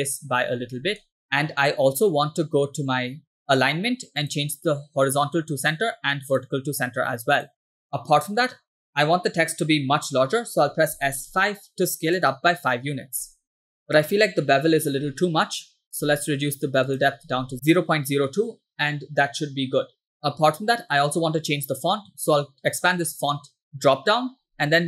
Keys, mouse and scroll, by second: 0.7 scroll down 1, 1.2 shift+middle click, 1.8-2.2 scroll down 1, 4.3-5.9 drag, 6.5-7.6 drag, 7.9 middle click, 10.3-10.9 scroll down 2, 11.0 s, 13.8 middle click, 14.2-15.0 scroll up 1, 16.1-16.9 scroll up 2, 17.0 click, 19.0-20.1 middle drag, 22.8 drag, 23.7 click.